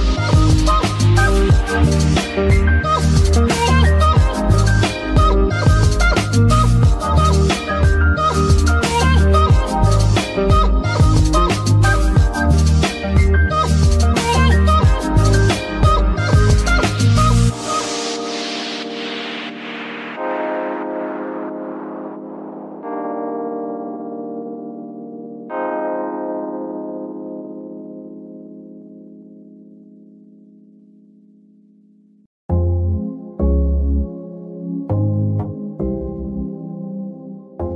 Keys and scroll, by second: 5.1 g, 5.6 Escape, 7.6 g, 8.1 Escape, 9.0 g, 9.5 Escape, 10.3 g, 10.9 Escape, 21.1 ctrl+Tab, 21.4 ctrl+a, 26.0 shift+z.